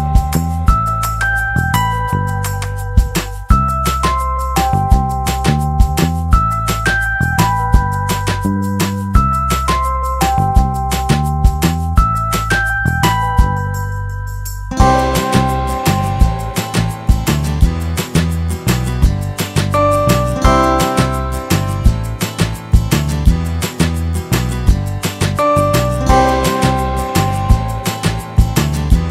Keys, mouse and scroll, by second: 0.9 click, 1.7 click, 2.5 click, 4.1 click, 6.3 click, 7.5 click, 8.3 click, 8.5 click, 9.3 middle click, 9.3 scroll up 1, 9.9 s, 11.2 s, 12.3 click, 12.5 middle click, 12.9 middle click, 14.4 click, 15.5 click, 19.0 click, 20.5 click, 21.9 click, 22.1 middle click, 22.1 scroll down 1, 22.4 middle click, 22.8 scroll down 1, 24.8 middle click, 25.2 scroll up 1, 26.5 click, 27.9 click, 28.8 s, 29.0 middle click.